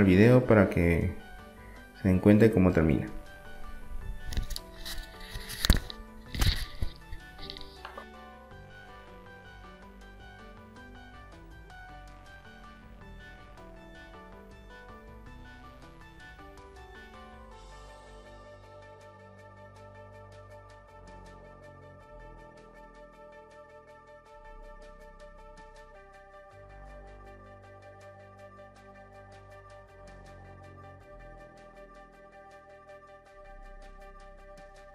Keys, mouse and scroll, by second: 2.2 r, 3.9-5.6 drag, 6.1 e, 8.3 click, 8.8 r, 9.9 e, 10.2 click, 10.9 r, 11.8 click, 12.3 middle click, 12.7 click, 13.2 middle click, 13.6 r, 14.2 click, 14.8-16.1 middle drag, 16.2 e, 17.5 click, 18.1 click, 19.0 click, 19.5 middle click, 21.5 click, 22.3 click, 23.1 click, 23.6 middle click, 23.8 middle click, 24.3 KP_3, 24.8 KP_1, 25.5 click, 26.1-27.2 middle drag, 27.4 r, 28.7 e, 29.9 r, 30.7 middle click, 31.3 click, 31.9 e, 32.2 middle click, 32.4 s, 33.2 e, 33.6 click, 34.2 r.